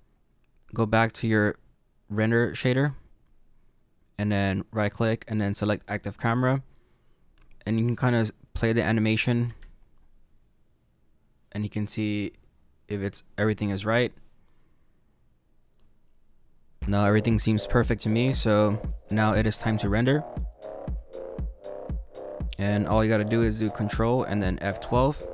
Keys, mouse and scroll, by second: 2.9 click, 5.7 right click, 7.7 click, 9.6 space, 19.5 space, 20.3 click, 21.2-24.7 scroll down 2.